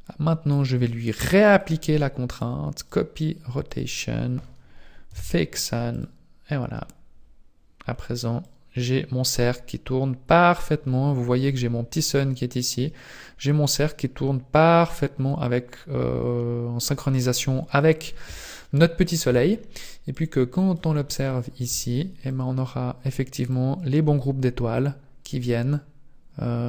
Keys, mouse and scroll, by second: 1.5 click, 3.7 click, 6.0 click, 8.6 click, 10.9-11.6 scroll up 3, 11.6 scroll up 1, 12.6 click, 12.6 scroll up 1, 20.1 click, 21.1-21.5 scroll up 4, 22.3 click, 23.3 click.